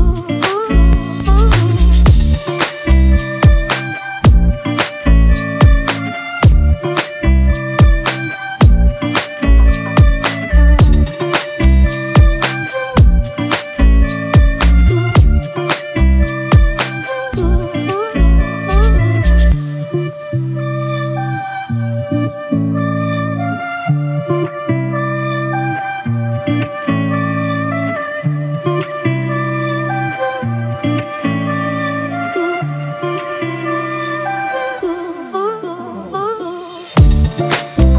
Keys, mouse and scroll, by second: 6.5 alt+BackSpace, 8.3 ctrl+d, 36.2 alt+click.